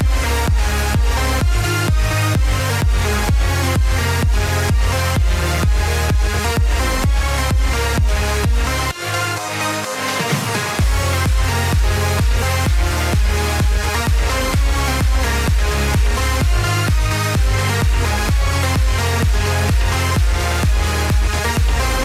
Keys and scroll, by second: 12.5 ctrl+alt+z.